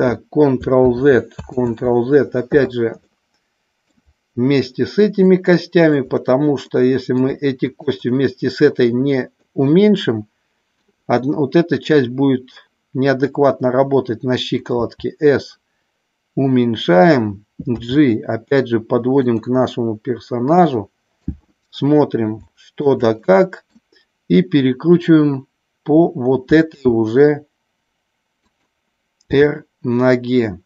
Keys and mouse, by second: 0.9 ctrl+z, 1.6 ctrl+z, 3.0 middle click, 5.2 shift+click, 6.6 middle click, 7.6 shift+click, 9.4-10.8 middle drag, 14.7 s, 17.9 g, 19.2 click, 19.5-21.4 middle drag, 22.4 shift+middle click, 23.1 middle click, 26.7 g, 28.4 click, 29.3 r.